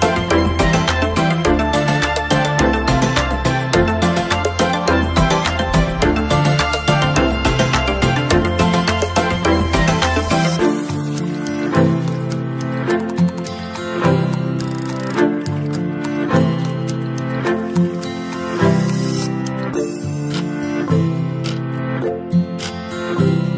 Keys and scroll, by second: 22.1 ctrl+z.